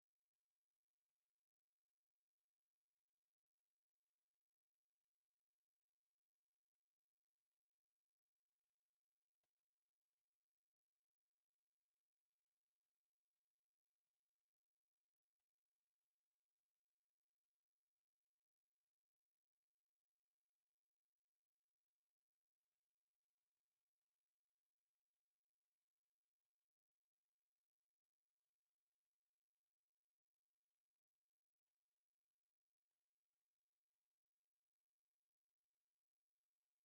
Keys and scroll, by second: 0.3 m, 0.4 space, 1.0 F8, 1.5 Escape, 1.8 e, 2.4 space, 2.7 Escape, 9.4 2, 10.7 KP_Divide, 11.5 5, 11.8 Return, 12.0 KP_Add, 14.6 Escape, 15.3 l, 15.4 space, 17.3 Escape, 17.4-20.2 typing, 17.9 Escape, 18.7 Escape, 19.9 Escape, 20.8 Escape, 21.5 m, 22.6 Escape, 23.4-25.2 typing, 24.0 Escape, 24.7 Escape, 25.7 Escape, 27.3 t, 28.0 Escape, 28.7 m, 28.8 space, 30.3 Escape, 30.9-35.0 typing, 31.5 Escape, 32.1 Escape, 33.8 Escape, 34.6 Escape, 35.8 Escape.